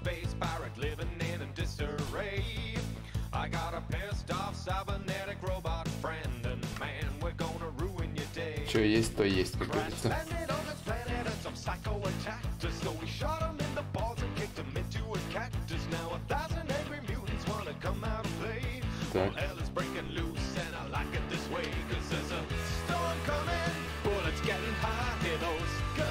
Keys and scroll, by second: 1.6 space, 3.1 s, 4.1 s.